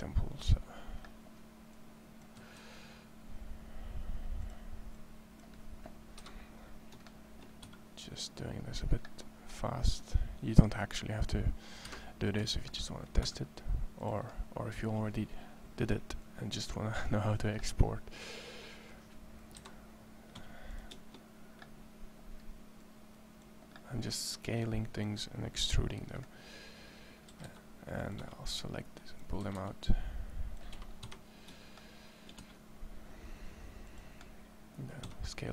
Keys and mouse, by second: 2.2 s, 4.1 click, 4.7 click, 6.0 KP_1, 7.4 e, 11.6 KP_1, 13.0 e, 19.3 KP_1, 20.2 s, 27.0 a, 27.3 a, 28.4 c, 29.2 a, 29.4 c, 30.8 KP_1, 32.2 e, 34.9 s.